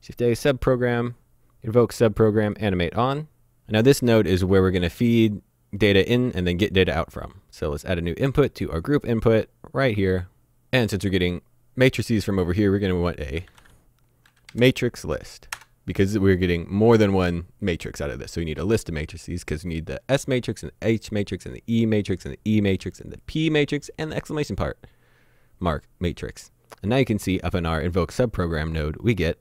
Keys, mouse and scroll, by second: 2.4 click, 8.7 click, 13.4 typing, 15.5 Return.